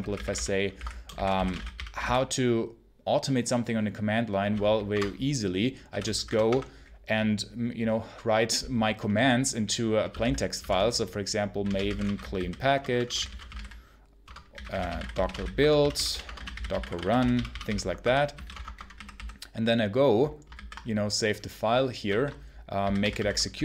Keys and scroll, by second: 0.0-2.4 typing, 4.8 Return, 5.5-6.5 typing, 9.7-19.3 typing, 14.1 Return, 20.4 ctrl+s, 21.9 ctrl+q, 22.4-23.6 typing.